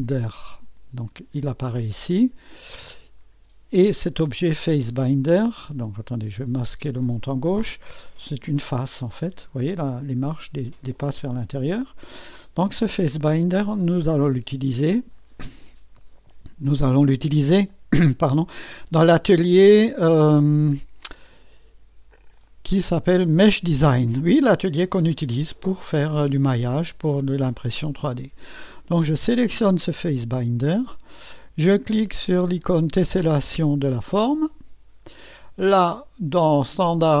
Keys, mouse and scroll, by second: 0.0 click, 6.1 click, 6.9 space, 7.9-9.8 drag, 9.8-11.0 scroll up 1, 11.0-12.5 drag, 13.5 click, 17.7 click, 23.4 click, 25.4-27.7 drag, 29.3-32.4 drag, 34.1-37.2 drag.